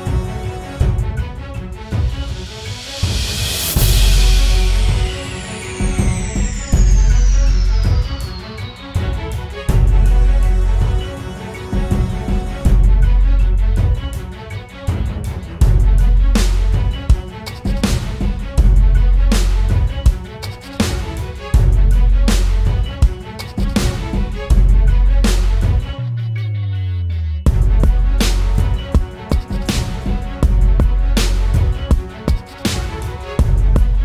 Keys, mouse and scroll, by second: 25.6 double click.